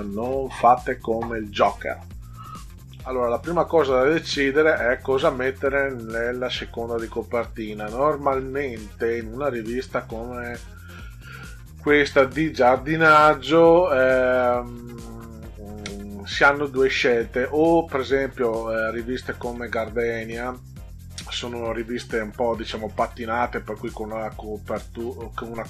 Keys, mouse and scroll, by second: 8.1 scroll down 2, 8.8 scroll up 2, 9.4 click, 9.6 click, 15.6 scroll down 2, 16.3 scroll down 2, 19.6 scroll up 4, 20.7-21.2 scroll up 6.